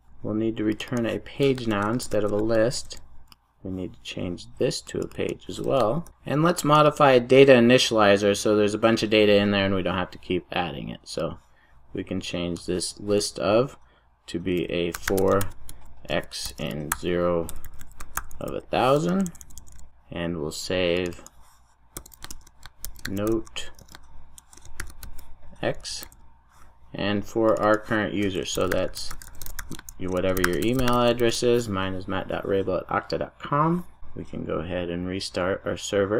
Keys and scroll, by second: 2.6 super+s, 2.7 super+s, 6.0 super+s, 19.8 super+s, 26.0 super+s, 31.2 super+s.